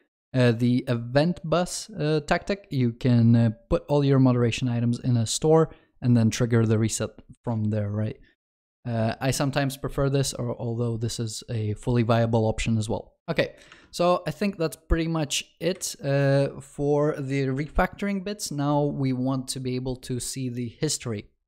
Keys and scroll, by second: 13.3 ctrl+s.